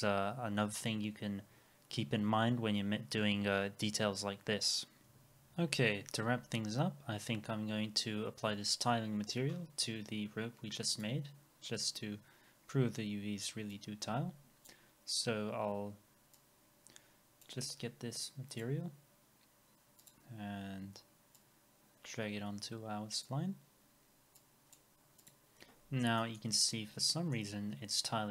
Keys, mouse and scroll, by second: 25.8-26.2 scroll up 1, 26.2 middle click, 26.7 alt+middle click.